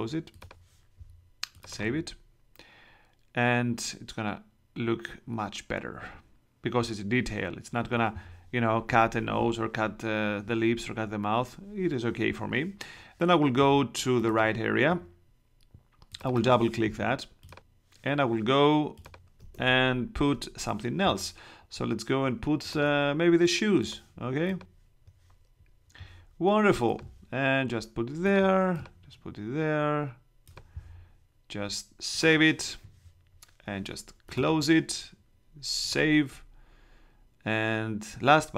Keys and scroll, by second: 19.5 super+Tab.